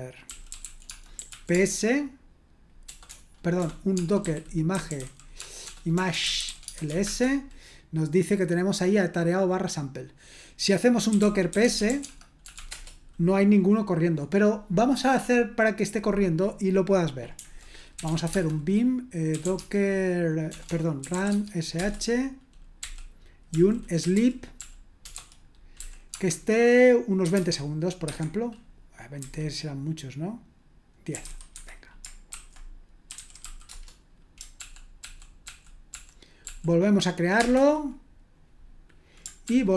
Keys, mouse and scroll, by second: 0.0-1.8 typing, 2.8-7.3 typing, 10.9-13.0 typing, 17.7-21.7 typing, 22.8-27.8 typing, 28.0 Escape, 29.1-34.2 typing, 34.6 ctrl+p, 35.0 ctrl+p, 35.5 ctrl+p, 35.9 ctrl+p, 36.4 ctrl+p, 37.0 typing, 37.4 Return, 39.4 ctrl+p.